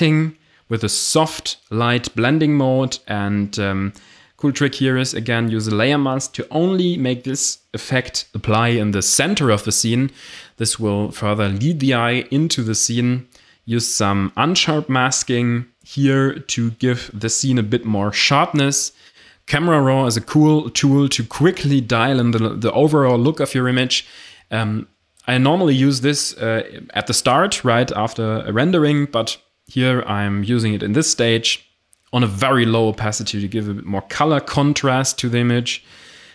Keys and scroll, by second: 4.5 Delete.